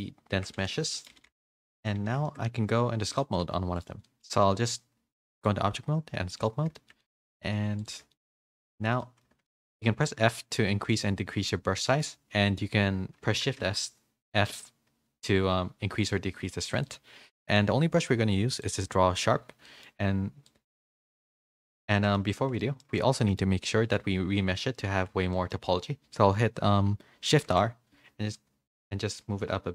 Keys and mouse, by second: 0.4 Tab, 0.6 a, 0.8 a, 0.8 middle drag, 1.2 a, 1.5 middle click, 2.0 a, 2.3 shift+middle click, 3.1 click, 3.4 g, 4.0 middle click, 5.3-6.6 drag, 6.7 shift+middle click, 7.0 middle click, 7.4 f, 8.1 shift+middle click, 8.4 middle click, 9.0 middle click, 9.4 shift+middle click, 9.9 f, 13.4 shift+f, 19.6 middle click, 20.4 click, 21.7 ctrl+z, 21.9 middle click, 22.8 shift+middle click, 23.2 middle click, 25.3 shift+middle click, 27.3 shift+r.